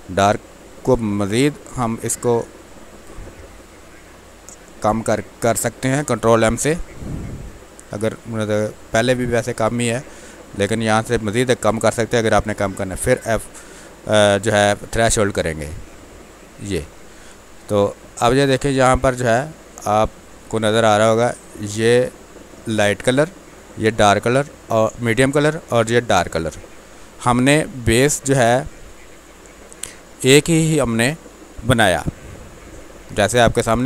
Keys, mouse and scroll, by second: 1.0 ctrl+l, 2.8-4.6 drag, 5.9 ctrl+m, 7.5 click, 8.7-12.6 drag, 13.0 F12, 15.4-17.1 drag, 17.1 space, 18.2 ctrl+click, 19.2 click, 19.8-33.8 ctrl+drag.